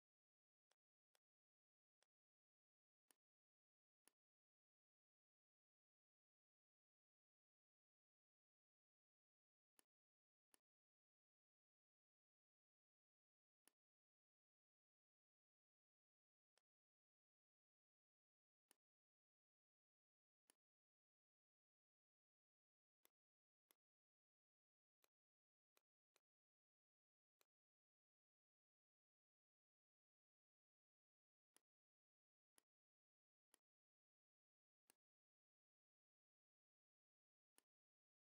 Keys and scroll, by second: 0.7 space, 3.9 space, 7.2 shift+x, 10.2 space, 28.7 KP_8, 28.9 KP_0.